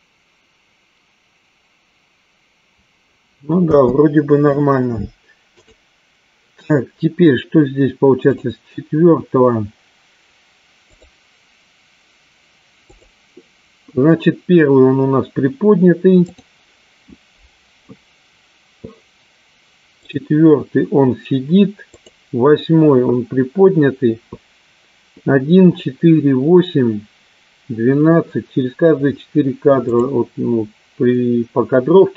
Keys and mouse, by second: 4.8 space, 6.3 click, 9.1 click, 11.4 click, 13.5 click, 16.4 click, 20.5 click, 22.7 click, 30.4 click.